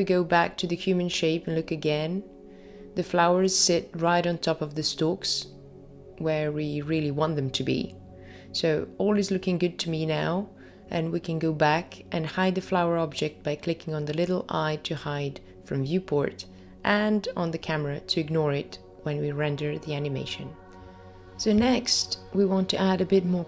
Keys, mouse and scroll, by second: 4.9-6.0 scroll up 1, 6.2-6.7 scroll up 1, 18.6 click, 20.0 click, 22.8 click.